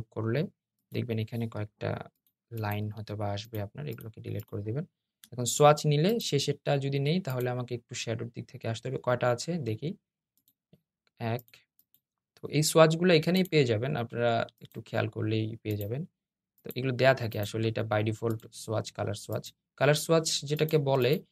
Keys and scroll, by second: 1.8 BackSpace, 2.5 BackSpace.